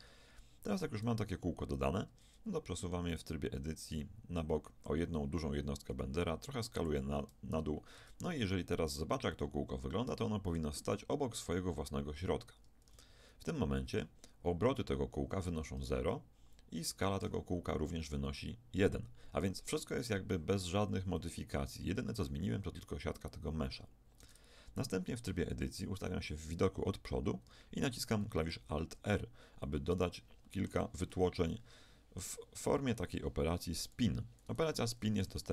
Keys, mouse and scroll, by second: 2.1 Tab, 3.3-5.6 drag, 5.9 s, 7.9 Tab, 9.3-11.1 middle drag, 12.9 n, 16.1-24.2 middle drag, 24.2 Tab, 25.9 KP_1, 28.5 alt+r, 29.6-32.9 middle drag, 34.7 n, 35.1 t.